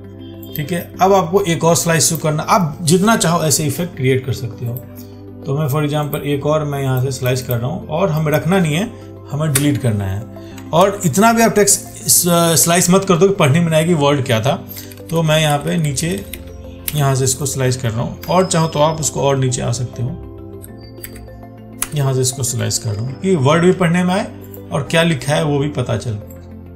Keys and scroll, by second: 11.1 ctrl+z, 18.5 ctrl+z, 23.1 ctrl+d.